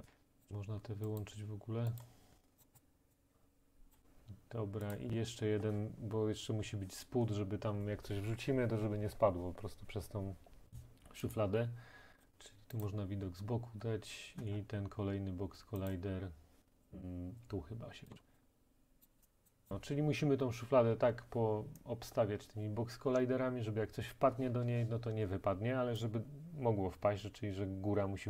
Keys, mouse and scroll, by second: 0.1 middle click, 0.2 scroll, 0.4 click, 1.2 click, 2.1 click, 2.6 click, 2.8 click, 3.9 click, 5.0 click, 11.4 click, 12.2-12.8 scroll, 12.9 click, 14.5 middle click, 15.7 scroll, 15.9 click, 19.0 click, 19.5 middle click, 19.7 right click, 21.8-24.5 right drag, 26.0-28.2 right drag.